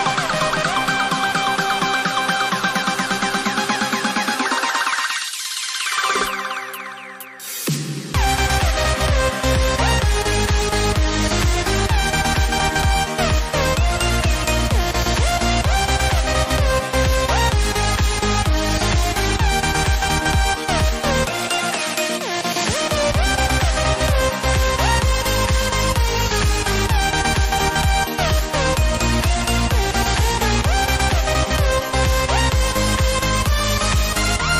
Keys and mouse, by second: 11.1 click, 13.8 click, 16.1 alt+click, 19.4 alt+click, 22.3 x, 24.2 ctrl+space, 24.4 ctrl+click, 24.7 ctrl+space, 27.9 ctrl+space, 28.0 ctrl+click, 30.1 typing, 31.3-34.0 typing.